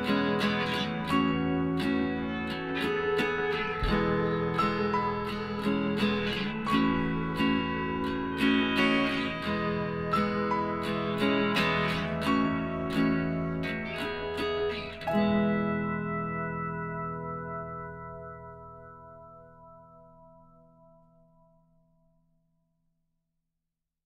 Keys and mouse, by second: 1.6-5.1 middle drag, 2.4-6.6 right drag, 5.6 middle click, 6.6 KP_Divide, 6.8 click, 7.0-9.3 middle drag, 9.7 s, 12.6 Tab, 12.9-15.0 middle drag, 15.0-16.8 right drag, 15.3 Tab, 15.7 click, 16.5-17.6 middle drag, 19.3-21.1 middle drag, 20.4-22.1 right drag, 22.4-24.0 right drag.